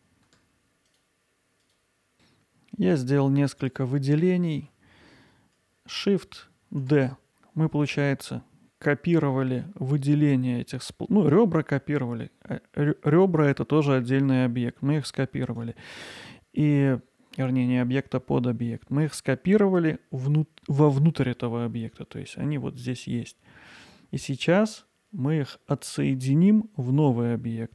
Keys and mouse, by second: 6.8 shift+d, 15.5-22.3 right drag, 22.3 g, 23.8-24.4 right drag, 24.4 middle click.